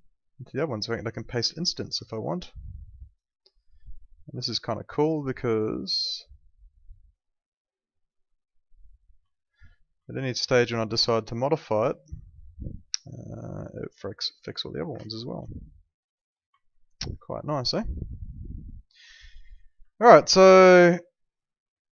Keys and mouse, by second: 1.3 click, 2.0 alt+middle click, 4.1 click, 5.1 right click, 6.2 click, 8.0 right click, 8.7 click, 9.2 alt+middle click, 10.5 click, 15.5 alt+middle click, 16.6 alt+middle click, 17.8 alt+middle click, 20.7 alt+middle click.